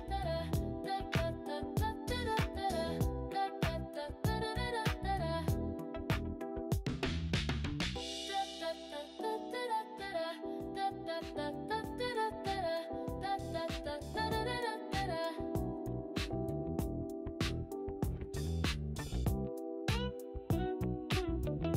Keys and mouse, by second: 3.6 click, 5.6-7.2 drag, 11.4-13.4 drag, 15.3 e, 16.8 click, 18.7 click, 19.8 g.